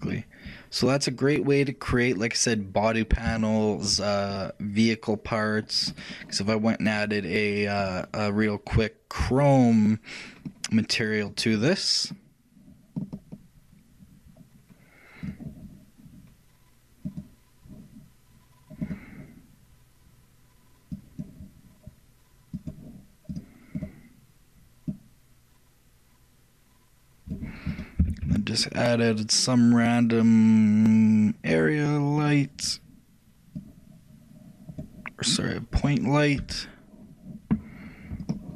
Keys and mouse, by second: 0.2-2.9 middle drag, 3.5 shift+middle click, 4.4-6.0 shift+middle drag, 6.0-9.3 shift+right drag, 7.1-9.5 drag, 11.4-13.5 drag, 17.2-18.8 drag, 21.0-22.9 drag, 23.4-26.7 drag, 27.8-29.6 shift+drag, 28.2 shift+a, 33.6-35.5 drag, 35.9-37.7 drag.